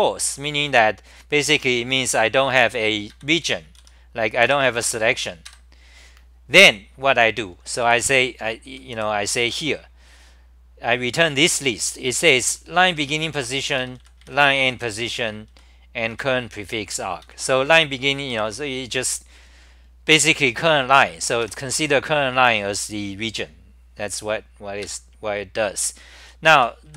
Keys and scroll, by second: 3.3 ctrl+g, 3.3 w, 3.8 r, 4.5 2, 7.6-9.9 typing, 12.0-14.7 typing, 15.2 ctrl+g, 15.9-16.6 typing, 17.2 ctrl+g, 17.7 w, 18.3 d, 21.4 2, 24.8 ctrl+g, 26.2-26.9 typing.